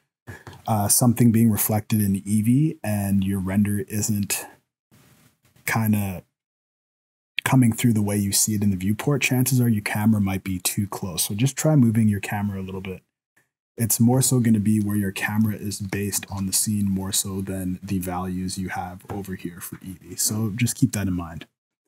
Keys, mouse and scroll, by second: 14.8-15.3 scroll up 1, 15.3 scroll down 1, 15.4 scroll down 2, 15.6 shift+middle click, 16.3 ctrl+s, 16.6-17.3 scroll up 2, 17.3-17.8 scroll down 1, 17.8-18.4 scroll down 1.